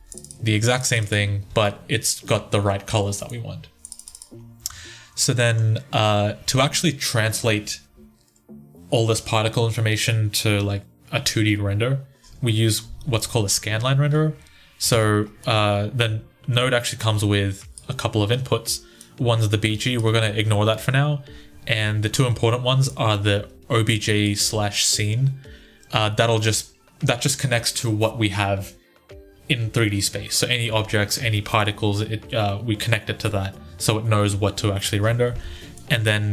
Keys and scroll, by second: 0.7 1, 5.4 typing, 14.7 1.